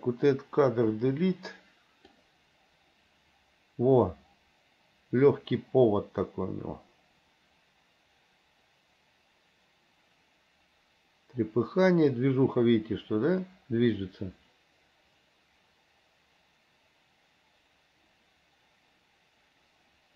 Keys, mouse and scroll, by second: 1.1 Delete, 2.4-20.1 drag.